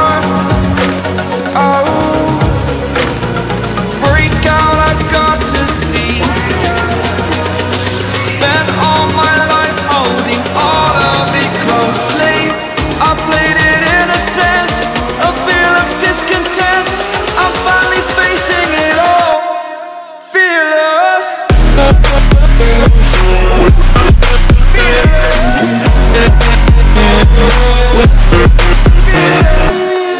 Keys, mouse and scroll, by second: 6.1 ctrl+scroll up 1, 7.0 right click, 7.6 click, 7.9 alt+scroll down 1, 10.4 ctrl+m, 12.2 m, 12.8 m, 14.1 click, 15.0 l, 29.2 click.